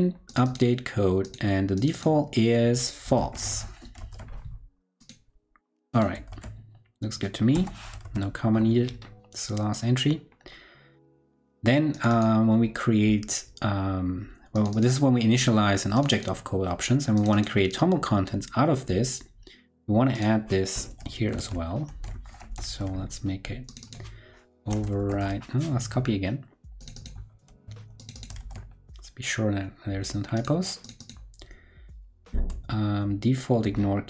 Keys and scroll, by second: 3.7 super+Right, 3.9 super+s, 6.2 super+s, 7.9 super+s, 21.1 super+Right, 21.3 shift+super+Left, 21.8 super+c, 22.5 super+v, 27.4 super+c, 28.3 super+v.